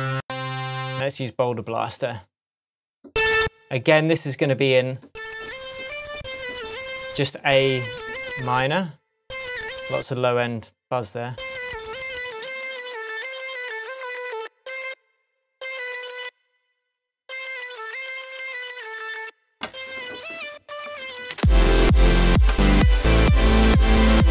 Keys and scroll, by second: 21.3 space.